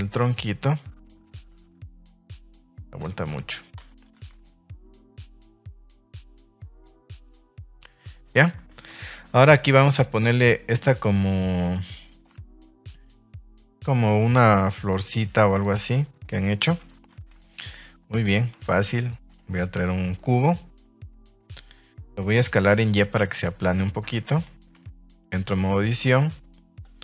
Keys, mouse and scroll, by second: 1.3 click, 2.3 right click, 2.5 Tab, 3.0 z, 5.8 click, 6.0 Tab, 6.3 z, 7.1 a, 7.2 a, 7.7-8.1 middle drag, 8.9 ctrl+s, 17.0 ctrl+KP_1, 17.1 ctrl+s, 17.3 shift+middle drag, 18.0 click, 18.3 shift+a, 21.1-21.6 middle drag, 23.9 click, 24.7 KP_1, 25.3 Tab, 25.7 z, 26.8 a, 26.9 a.